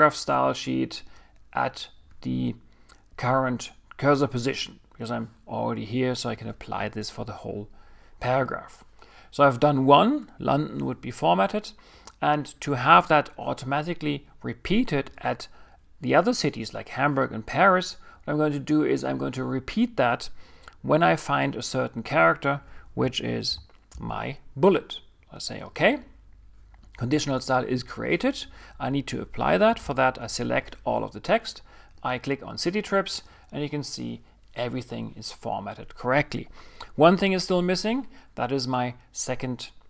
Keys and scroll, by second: 29.7 super+a.